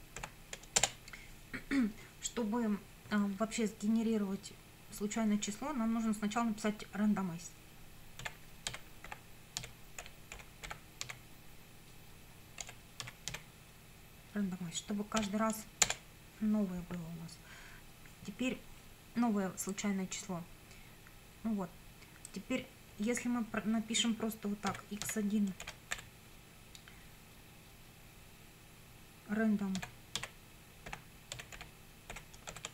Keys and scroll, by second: 0.0-0.2 typing, 0.8 Return, 8.0-11.6 typing, 12.6 BackSpace, 13.0 z, 13.3 e, 15.2 ;, 15.9 Return, 24.7 x, 25.0 1, 25.6 shift+;, 25.9 =, 29.8-32.5 typing.